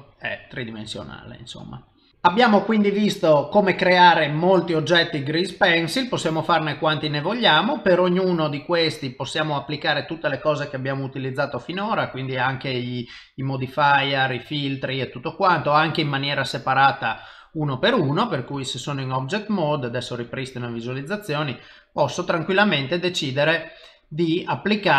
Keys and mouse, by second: 1.0 middle click, 5.3 middle click, 20.3 click, 21.8 click.